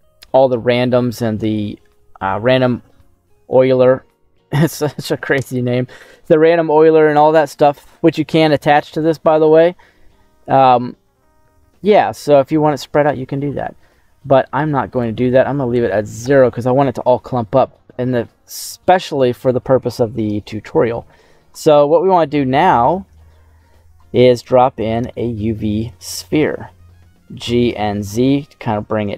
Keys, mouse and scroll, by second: 4.2-7.6 middle drag, 8.6 middle click, 9.0-10.0 scroll down 2, 9.3 middle click, 10.3 scroll up 2, 10.7-11.2 scroll down 2, 11.2-12.3 middle drag, 14.9-16.3 drag, 17.9 scroll down 2, 18.2 middle click, 18.9 middle click, 19.5-20.5 scroll up 2, 20.5-21.0 scroll down 1, 21.0 scroll down 1, 21.8 shift+middle click, 24.3 shift+a, 25.0 shift+a, 27.3 g, 27.6 z.